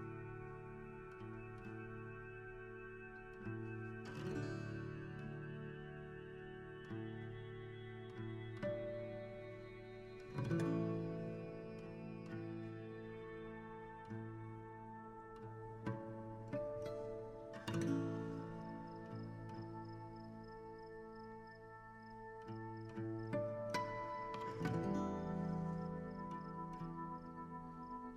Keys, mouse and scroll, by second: 0.0-0.9 scroll up 2, 0.9-2.2 right drag, 2.2 KP_3, 3.1 g, 5.2 r, 7.0 KP_1, 7.3-7.8 scroll up 5, 12.9 scroll down 2, 13.8-16.5 middle drag, 16.5 right click, 19.5 click, 20.3 click, 21.7-25.6 drag, 26.3-28.1 drag.